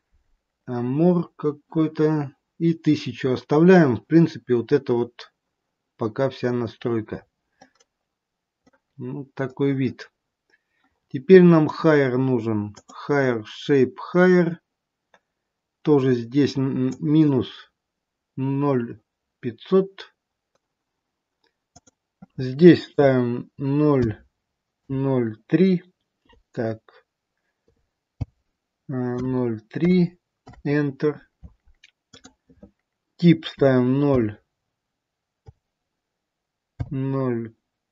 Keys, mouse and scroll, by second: 7.2 scroll up 2, 7.9 middle click, 9.0 scroll down 1, 10.9-12.6 scroll down 7, 12.6 click, 13.6-15.8 scroll down 2, 16.8 click, 21.6 click, 32.1 click.